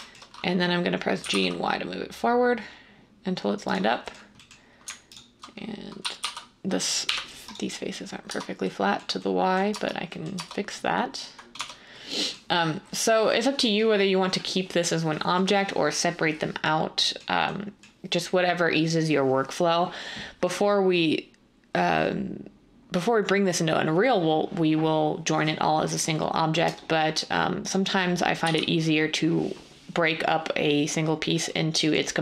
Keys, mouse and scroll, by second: 1.1 typing, 5.7-7.0 typing, 8.3 Tab, 9.7 Tab, 10.3 Tab, 11.5 Tab.